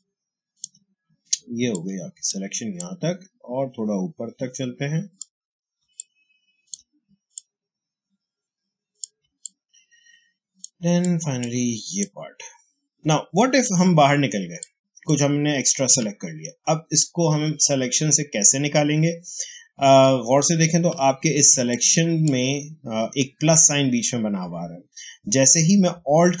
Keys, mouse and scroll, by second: 0.0 click, 0.2 space, 1.6 click, 2.0 space, 2.7-5.7 drag, 5.7 space, 5.9 click, 6.3 space, 7.2-9.2 drag, 9.1 space, 9.3 click, 9.6 space, 10.9 click, 11.0 space, 11.9-16.0 drag, 16.0-16.3 alt+scroll down 1, 19.8 alt+scroll up 1, 21.4 space, 21.6 click, 21.9 space.